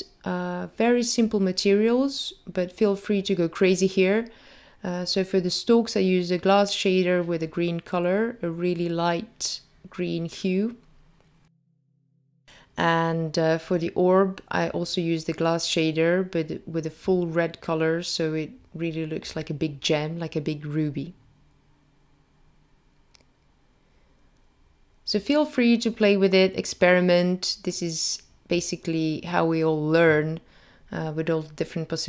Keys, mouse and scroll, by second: 0.6 click, 1.7 click, 6.5 click, 6.9 middle click, 8.2 click, 8.7 click, 10.8 click, 12.5 click, 13.5 click, 14.6 click, 17.5 click, 17.9 click, 18.4 click, 18.8 shift+a, 18.9 click, 19.4 s, 20.4 click, 21.4 click, 30.2 click, 31.8 click.